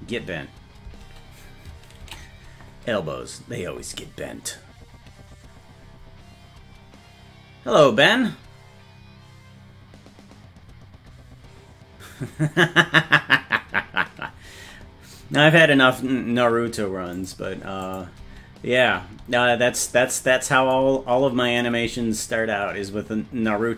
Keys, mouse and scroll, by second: 0.0 space, 0.9 space, 2.2 ctrl+s, 17.2 click, 17.9 click, 18.2 space, 19.1 space, 21.5 click, 21.9 space.